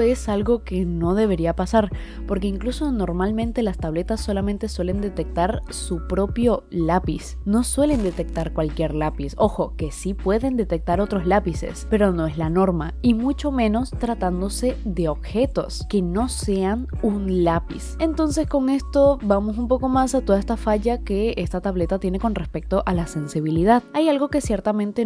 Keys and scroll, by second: 15.2 i.